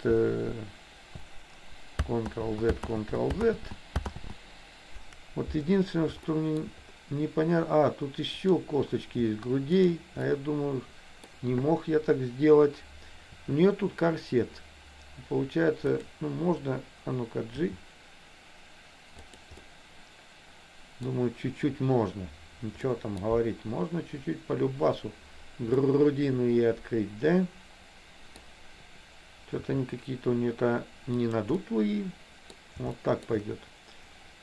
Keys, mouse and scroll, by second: 2.5 ctrl+z, 2.9 ctrl+z, 3.5 ctrl+z, 4.3 ctrl+z, 6.3 shift+middle click, 8.5 click, 9.9 shift+click, 10.3-11.3 middle drag, 13.4 r, 17.6 g, 19.7-21.2 middle drag, 22.9 middle click, 25.9-28.4 middle drag, 29.7 r, 31.7-32.7 middle drag, 33.1 shift+middle click.